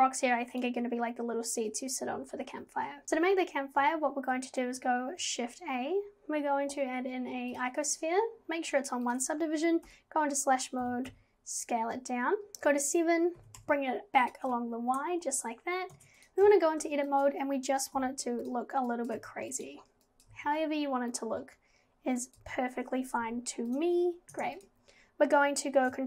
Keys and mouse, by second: 3.0 click, 4.4 shift+a, 9.1 click, 9.9 /, 10.8 g, 12.5 KP_7, 13.4 g, 15.9 Tab, 17.1 click, 18.0 g, 19.0 click, 19.2 g, 20.1 click, 20.3 g, 22.3 click, 23.2 g, 24.2 g, 24.4 Tab.